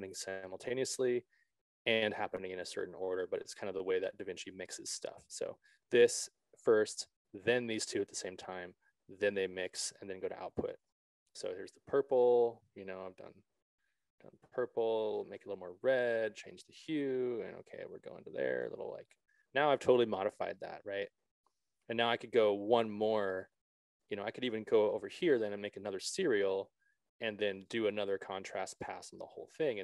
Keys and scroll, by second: 25.3 alt+s.